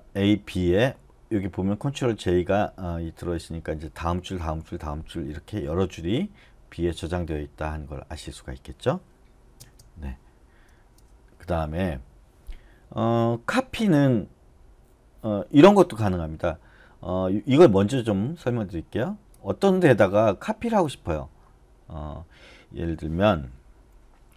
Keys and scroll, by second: 9.6 space.